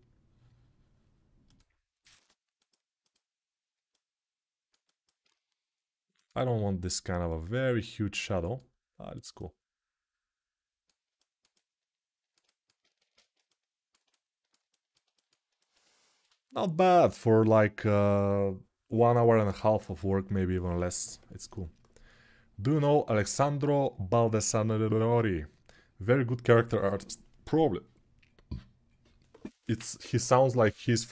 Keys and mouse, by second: 12.0-14.3 ctrl+alt+shift+right drag, 12.7 ctrl+space, 14.3-31.1 alt+shift+drag.